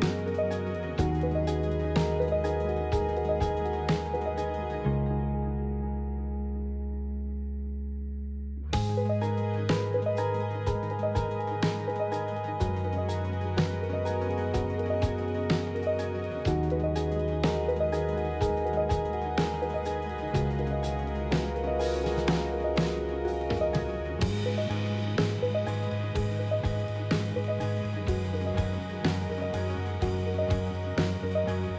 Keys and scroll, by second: 24.4 shift+z.